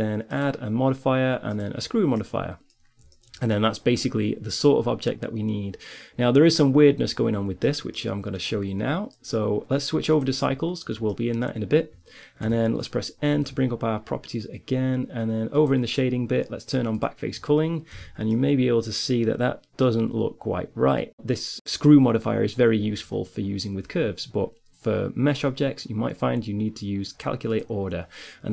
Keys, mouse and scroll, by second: 2.1 middle click, 4.8-6.6 middle drag, 6.9-8.5 middle drag, 8.5-10.5 drag, 10.9-12.3 middle drag, 12.3 n, 15.8-17.9 drag, 17.7 n, 17.9-19.6 middle drag, 21.2 click, 27.3-28.5 drag.